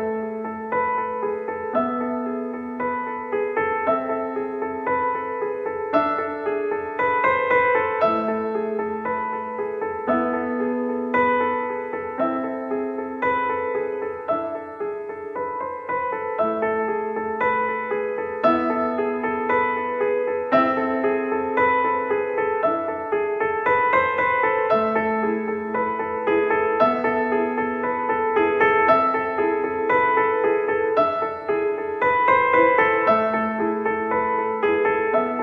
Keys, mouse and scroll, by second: 0.5 middle click, 0.7 e, 2.1 click, 2.5 Tab, 4.7 KP_1, 5.8-6.8 drag, 7.1-7.5 drag, 8.3 middle click, 8.5 click, 9.1 middle click, 9.4-10.4 drag, 10.9-12.4 drag, 12.4-12.8 middle drag, 12.8 right click, 13.0 Tab, 13.9 middle click, 14.1 click, 14.3 middle click, 14.5-14.9 drag, 15.1 middle drag, 15.5-16.3 drag, 15.8 right click, 16.8-17.3 middle drag, 17.3 click, 17.8-19.2 middle drag, 19.2 click, 20.4-20.9 middle drag, 20.9 click, 20.9 x, 21.6-22.3 drag, 22.1 Tab, 22.3 middle click, 22.3 click, 23.3 click, 23.4 x, 23.9 click, 24.1 a, 25.3 s, 25.9 middle click, 26.7 click, 27.3 KP_1, 28.5 click, 29.6 click, 30.1 r, 31.6 middle click, 32.3 click, 32.6 e, 33.1 middle click, 33.8 click, 34.4 middle click, 35.3 w.